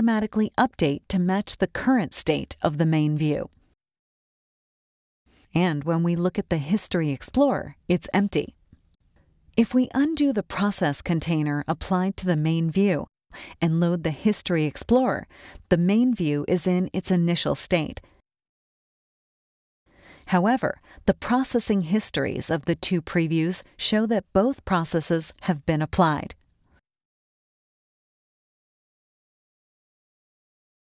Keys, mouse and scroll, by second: 1.4 click, 2.9 click, 4.3 click, 5.0 click, 6.1 right click, 7.5 click, 11.8 click, 14.8 click, 16.3 right click, 17.4 click, 21.5 click, 22.4 right click, 23.7 click, 27.7 click, 28.0 right click, 29.6 click.